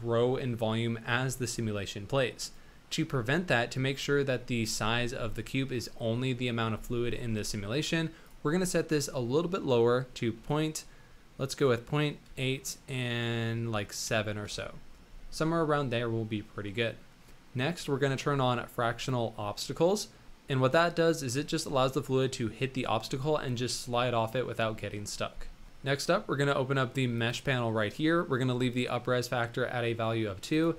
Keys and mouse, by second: 4.2 middle drag, 8.2-16.5 drag, 22.7 middle click, 27.1 click, 30.4-30.7 drag.